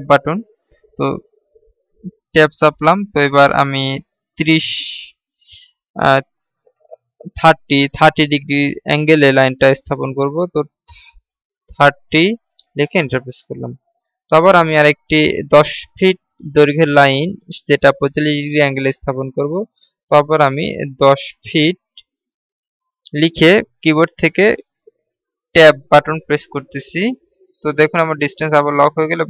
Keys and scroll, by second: 26.0 Tab.